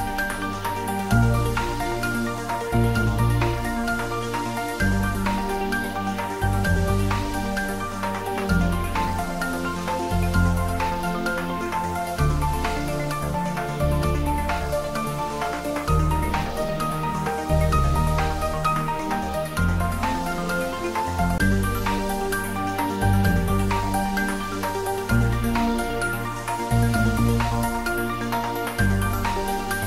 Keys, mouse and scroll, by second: 0.8 click, 1.4 Tab, 2.0 click, 4.2 click, 16.5-17.8 scroll down 1, 19.3 click, 24.2-29.8 drag.